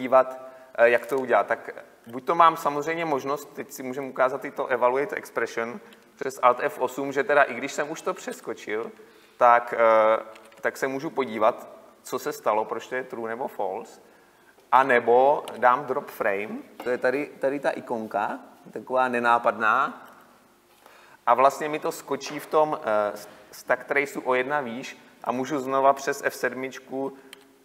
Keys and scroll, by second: 8.6 alt+F8, 14.8 Escape, 27.4 F7.